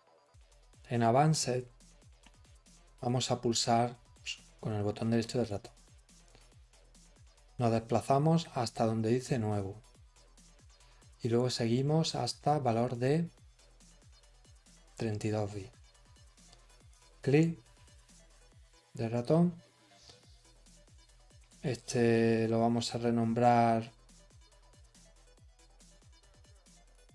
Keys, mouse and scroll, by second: 0.2 click.